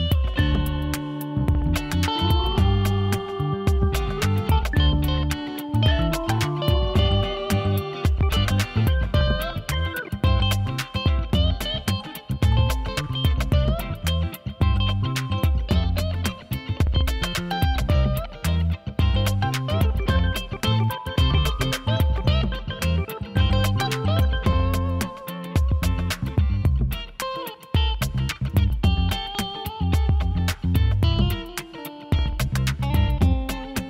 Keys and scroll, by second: 2.0 ctrl+z, 3.7 ctrl+z.